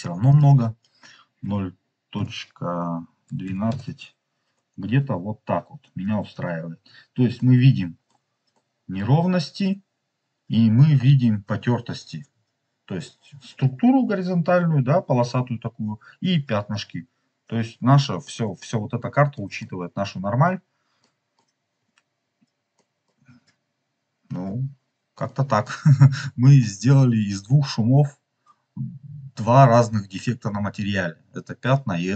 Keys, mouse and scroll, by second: 0.2-3.4 drag, 4.5-4.9 scroll up 3, 4.9 scroll down 2, 5.5-6.2 scroll down 1, 7.2-8.0 middle drag, 8.4-8.9 middle drag, 17.0-18.1 scroll down 6, 18.1 middle click, 18.9 scroll down 2, 19.3 middle click, 19.6 middle click, 19.7-20.3 scroll down 2, 21.0 middle click, 22.6 middle click, 23.2 scroll up 2, 25.2 middle click, 25.4 scroll up 1, 26.5 middle click.